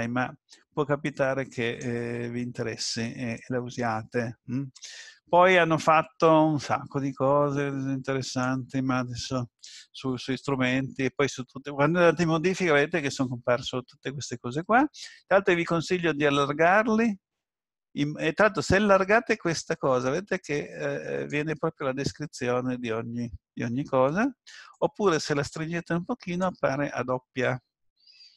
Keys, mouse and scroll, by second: 8.2 click, 14.5 click, 24.7 click.